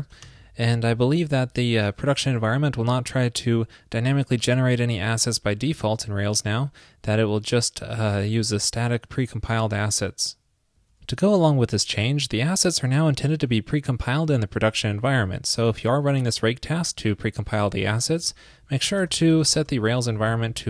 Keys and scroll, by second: 18.1 ctrl+a.